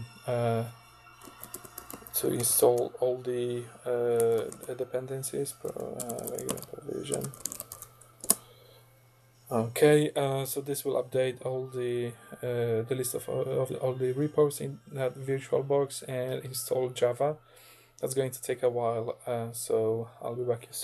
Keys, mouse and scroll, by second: 1.0-8.2 typing.